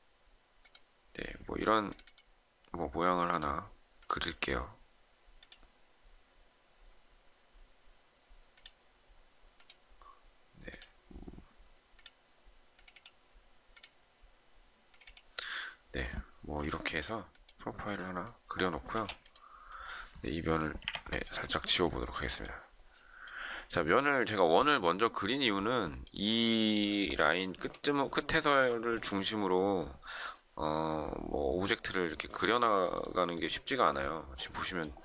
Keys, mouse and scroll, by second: 16.8 e, 18.8 space, 20.8 Delete, 27.3 shift+middle click.